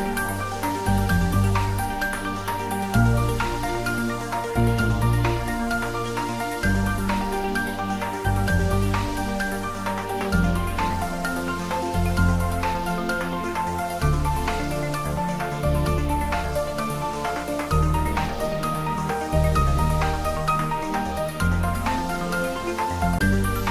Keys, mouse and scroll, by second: 0.7 click, 3.8 click, 7.9 click, 11.4-18.7 drag, 18.7-22.5 drag, 22.5 right click.